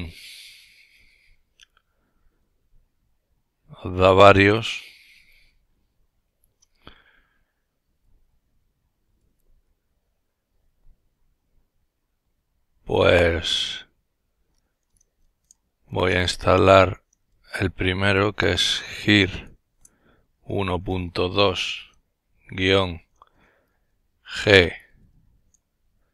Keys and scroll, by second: 13.9-16.0 typing, 17.6-18.6 typing, 19.7-21.9 typing, 24.3 typing.